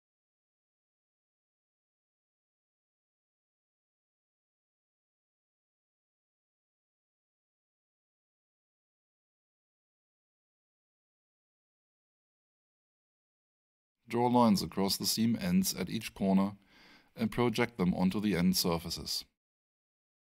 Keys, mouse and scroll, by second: 0.4 alt+shift+click, 0.8 alt+shift+right click, 2.0 alt+click, 2.5 alt+shift+middle click, 4.5 click, 7.2 alt+shift+right click, 7.6 alt+shift+click, 19.1 2, 19.4 Return.